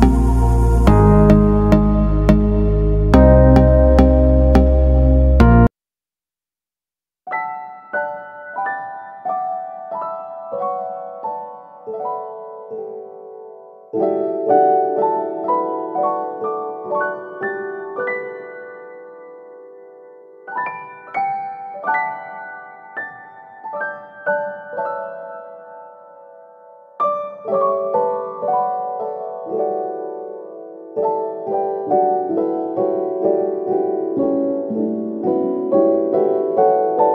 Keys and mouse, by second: 0.7 shift+middle click, 1.6 right click, 1.7 g, 2.9 right click, 3.1 g, 3.9 alt+z, 4.3 right click, 5.1 right click, 5.5 g, 6.3 right click, 6.4 g, 7.3 right click, 7.4 g, 8.1 right click, 8.1 g, 8.8 alt+z, 9.2 middle click, 10.8 middle click, 11.5 shift+middle click, 12.0 middle click, 12.7 KP_1, 13.6 right click, 14.2 alt+z, 14.7 right click, 15.3 alt+z, 15.8 right click, 16.3 right click, 16.8 right click, 18.3 click, 19.2 alt+z, 21.4 alt+z, 22.3 right click, 22.6 g, 24.6 middle click, 26.0 right click, 26.9 right click, 27.4 KP_3, 28.3 shift+middle click, 32.5 g, 33.9 right click, 34.1 g, 35.4 alt+right click, 35.7 KP_1, 36.3 shift+middle click.